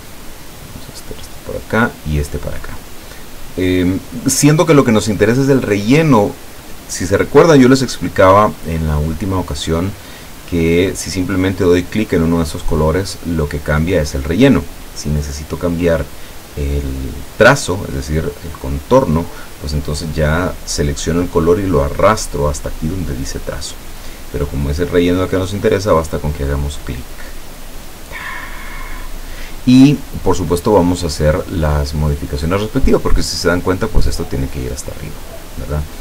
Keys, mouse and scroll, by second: 0.9 click, 2.2 click, 26.4 click, 31.1 click, 31.8 click, 33.5-34.9 drag.